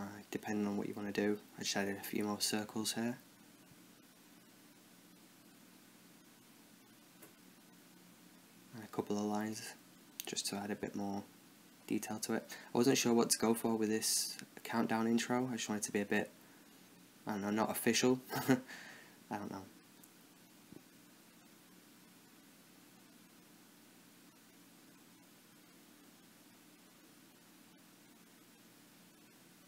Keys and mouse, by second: 0.0 KP_0, 0.4 middle click, 0.9 middle click, 1.4 click, 1.8 Tab, 1.9 e, 2.1 s, 2.6 Tab, 2.8 click, 3.9 click, 4.4 click, 4.6 right click, 4.8 s, 5.4 Tab, 6.0 shift+d, 6.2 s, 6.7 Tab, 6.8 s, 7.5 middle click, 7.6 click, 8.1 middle click, 8.3 right click, 8.8 click, 9.1 right click, 9.3 click, 10.2 middle click, 10.4 click, 10.8 middle click, 11.0-12.5 right drag, 12.2 middle click, 12.5-13.6 drag, 13.8 shift+a, 14.3 s, 14.6 s, 15.3 middle click, 16.0 click, 17.3 click, 17.7 KP_0, 17.9 shift+d, 18.7 s, 19.3 s, 20.0 right click, 20.4-24.7 typing, 20.8 right click, 21.5 middle click, 21.7 click, 22.3 Tab, 22.9 middle click, 23.0 Tab, 23.8 click, 23.9 right click, 25.3 click, 25.4 right click, 25.8 ctrl+KP_Add, 26.1-27.2 drag, 27.1 Tab, 27.4-29.6 drag.